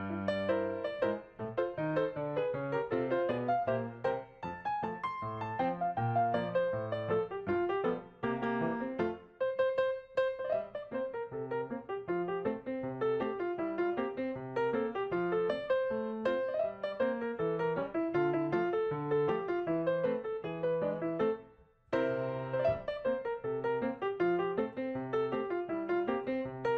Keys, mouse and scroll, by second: 7.9 scroll down 1, 8.4-9.1 typing, 12.4 ctrl+click, 15.4 right click, 22.5 ctrl+click, 22.9 right click.